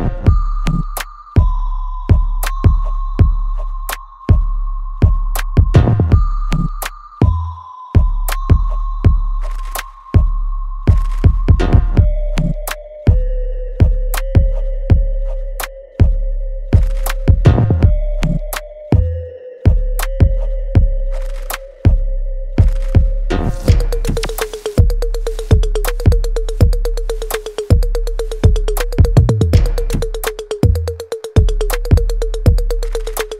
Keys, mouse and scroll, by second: 7.0-13.1 ctrl+drag, 13.1-17.8 alt+drag, 17.8-19.6 alt+right drag, 19.6-21.7 alt+drag, 21.7-23.4 alt+right drag, 23.4-25.0 ctrl+drag, 25.0 alt+right click, 25.4 alt+click, 26.7 right click, 27.4 click, 27.7 alt+right click, 28.8 click, 30.2 right click, 31.8 click.